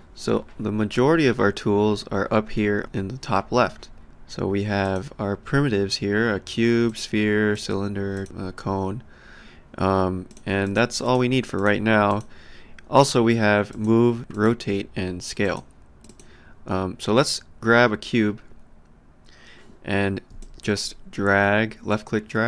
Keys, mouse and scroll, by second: 4.8 click, 6.9 click, 10.3 click, 13.7 click, 15.4 click, 20.4 alt+click, 21.9 click.